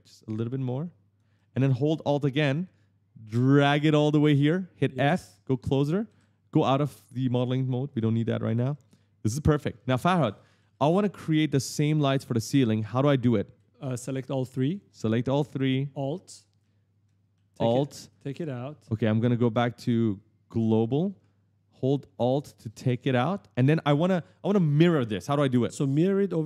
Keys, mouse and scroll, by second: 0.4 click, 1.1 a, 1.9 s, 3.2 alt+click, 5.0-6.4 typing, 5.5 right click, 6.6 click, 7.2 click, 7.7 right click, 9.3-13.5 typing, 12.2 right click, 14.4 shift+click, 14.7 right click, 14.9 w, 16.1 shift+click, 16.1-17.1 typing, 20.3 click, 22.5 alt+click, 25.7-26.4 typing, 25.9 right click.